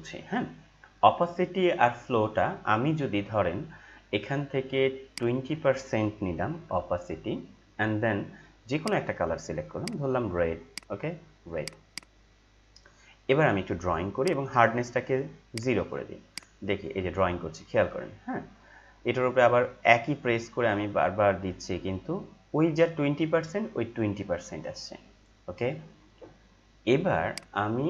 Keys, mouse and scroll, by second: 5.1-8.0 drag, 8.7 click, 14.1 right click, 14.2 right click, 15.5-26.3 drag, 27.3 click.